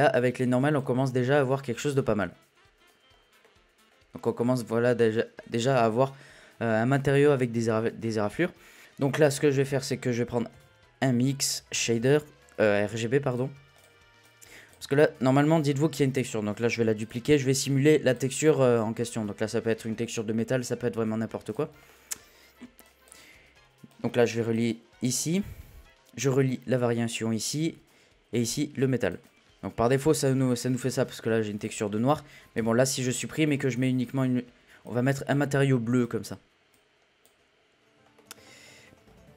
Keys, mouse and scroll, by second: 0.1-1.5 drag, 1.5-1.9 middle drag, 1.9-2.3 scroll up 1, 2.3-2.9 middle drag, 2.9-3.4 scroll down 1, 3.4-3.9 middle drag, 3.9-4.5 scroll down 2, 4.5-6.9 middle drag, 6.9-7.3 scroll up 2, 7.3-8.4 middle drag, 8.4-8.8 scroll up 2, 8.8 click, 15.7 shift+d, 18.1 click, 21.5 click, 21.6 scroll up 1, 21.9-22.9 middle drag, 22.9 click, 23.9-26.4 drag, 28.5-29.3 drag, 29.4 click, 29.6 scroll up 2, 29.9-30.5 middle drag, 30.5-30.9 scroll down 1, 31.5 click, 32.6 Delete, 33.7 click, 37.8-38.1 scroll up 1, 38.1 middle click, 39.0-39.3 scroll up 2.